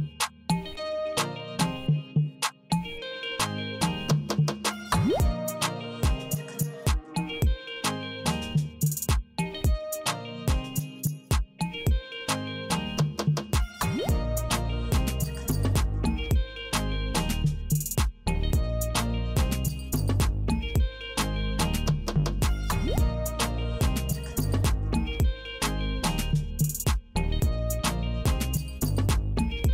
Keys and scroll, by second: 0.9 s, 2.5 s, 4.5 Right, 6.4 m, 7.9 m, 9.7 Right, 11.7 w, 12.8 w, 14.0 w, 15.2 w, 16.5 w, 17.8 w, 19.1 w, 20.3 w, 21.5 w, 22.7 w, 23.9 w, 25.1 w, 26.3 w, 27.5 w, 28.7 w.